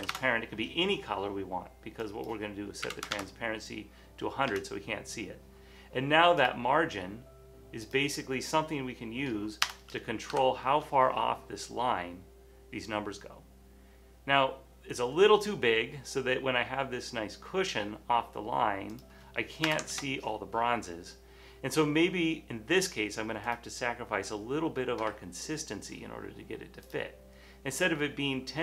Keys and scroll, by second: 0.0-0.6 typing, 1.8 typing, 2.8-3.5 typing, 4.6 Return, 7.3 typing, 9.8-10.4 typing, 10.8 Return, 13.9 typing, 19.8 typing, 20.0 Return.